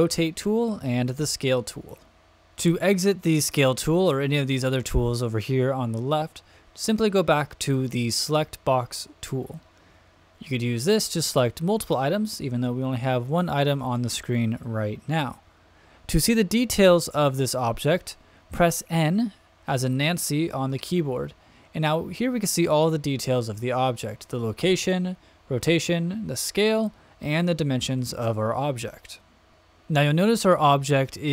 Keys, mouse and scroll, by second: 1.1 click, 8.4 click, 9.8 click, 11.3 click, 20.7 n, 29.5 click.